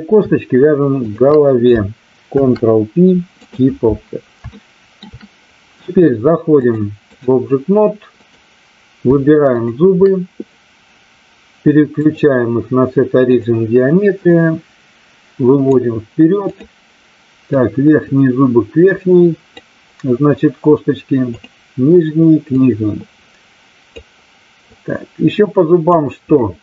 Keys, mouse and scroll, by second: 1.0 shift+click, 4.4 shift+middle click, 6.6-7.2 drag, 8.0 click, 9.6 shift+click, 12.0-13.4 drag, 14.2-15.7 drag, 16.4 click, 17.4-19.6 drag, 22.6-23.9 drag, 24.7-25.8 drag.